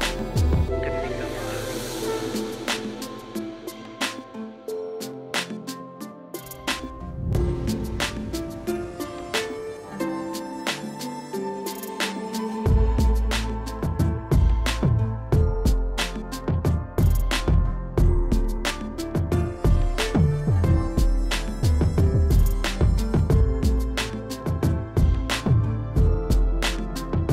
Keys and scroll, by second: 6.4 space, 7.2 space, 11.2 space, 12.6 space, 12.9 [, 15.9 ctrl+space, 16.4 [, 19.7 space, 24.0 space, 24.4 ].